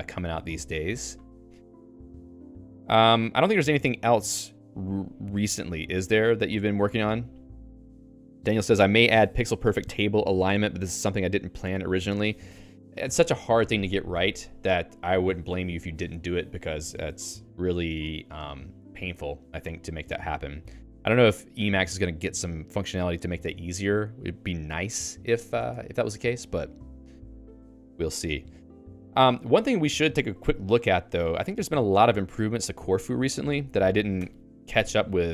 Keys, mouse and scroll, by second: 1.2 click, 1.4 Escape.